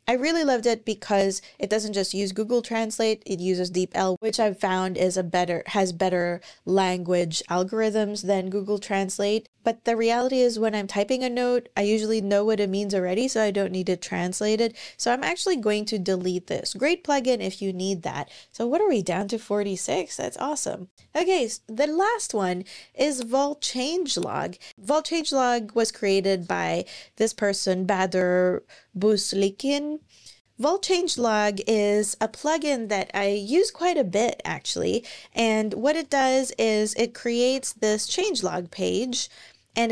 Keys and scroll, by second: 35.8 Escape, 36.2 Escape, 36.9-38.1 typing.